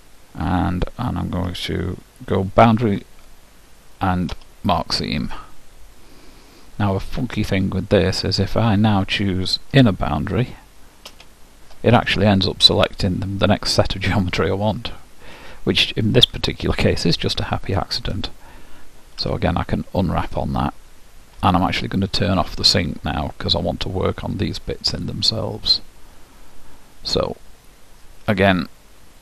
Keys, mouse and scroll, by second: 2.8 shift+', 7.8-11.2 middle drag, 15.4-17.1 drag, 16.4-18.3 middle drag, 19.3 u, 22.4-24.4 drag.